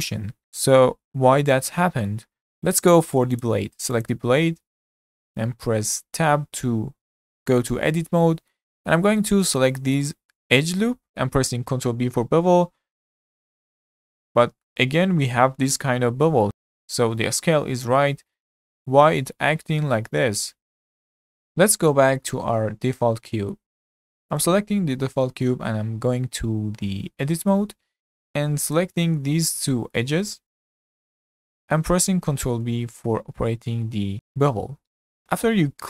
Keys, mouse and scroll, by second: 0.6-3.4 middle drag, 3.4 click, 4.0 click, 4.5 scroll down 2, 4.8-6.2 shift+middle drag, 6.2 Tab, 7.8-8.8 middle drag, 8.8-9.2 scroll up 2, 9.2 middle click, 9.9 alt+click, 10.4 scroll down 5, 10.6-11.7 shift+middle drag, 11.7 ctrl+b, 14.5 scroll down 3, 14.8-16.8 shift+middle drag, 16.8 Tab, 18.3 Tab, 18.7-20.8 shift+middle drag, 21.2-21.6 scroll up 3, 21.6-24.3 shift+middle drag, 24.3 click, 27.2 Tab, 28.2 2, 28.7 click, 29.5 shift+click, 29.9-32.3 middle drag, 32.3 ctrl+b.